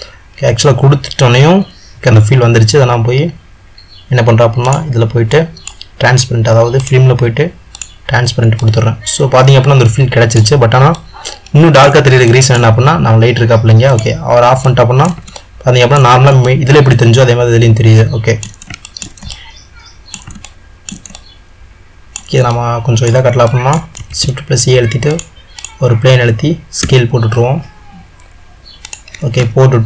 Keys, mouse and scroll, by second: 3.4-6.0 middle drag, 8.1 click, 8.7-14.2 middle drag, 14.2 click, 14.7-26.0 middle drag, 26.0 shift+a.